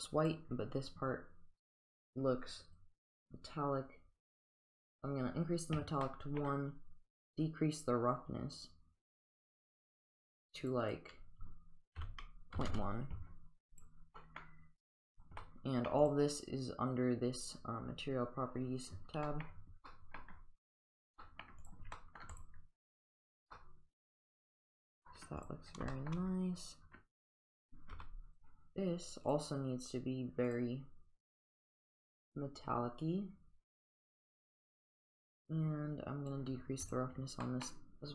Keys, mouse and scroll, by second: 2.8-4.9 drag, 6.1 middle click, 7.4-10.8 drag, 10.9-13.2 drag, 14.2 middle click, 15.4-15.9 middle drag, 16.0 click, 19.3 middle drag, 19.9 middle drag, 21.2 middle drag, 21.6 click, 22.0 middle drag, 22.4 click, 23.6-25.1 middle drag, 25.9 shift+middle drag, 28.0 g, 29.4 click, 30.5 click, 33.1-34.0 drag, 35.4 click, 36.9 click, 37.5 middle drag.